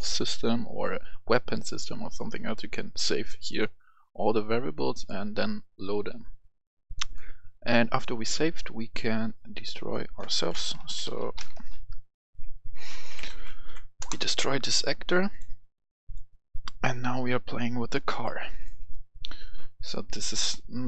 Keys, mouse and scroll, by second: 3.9 right click, 9.9 click, 10.6-11.5 typing, 13.1 Down, 13.2 Right, 13.4 Right, 14.0 Return, 14.8 click, 16.3 click, 17.1 right click, 18.2 click, 20.1 right click.